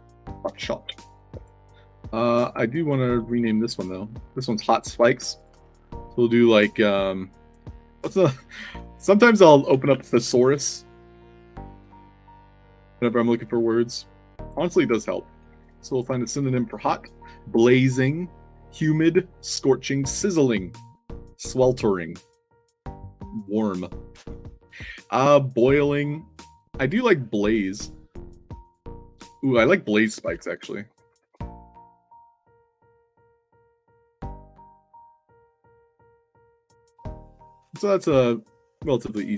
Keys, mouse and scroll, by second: 1.4 middle click, 1.6 space, 3.1 click, 5.3-5.7 drag, 8.1 click, 8.4 click, 9.1 click, 9.7-12.1 typing, 13.2 click, 14.6 click, 15.4 o, 19.3 click, 28.6 click, 29.1 click, 29.3 click, 30.6-33.2 typing, 34.5 click, 35.0 click, 35.6 click, 36.4 click, 38.0 click, 38.2 click.